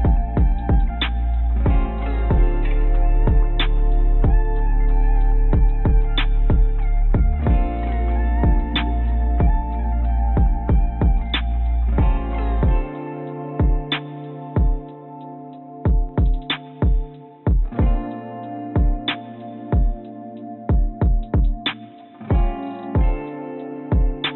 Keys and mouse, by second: 0.3 g, 4.5 s, 6.7 2, 8.1 Tab, 14.7 ctrl+z, 14.9 ctrl+z, 15.1 ctrl+z, 15.3 ctrl+z, 15.5 ctrl+z, 15.7 ctrl+z, 15.9 ctrl+z, 16.1 ctrl+z, 16.7 click, 17.8 shift+d, 22.1 s.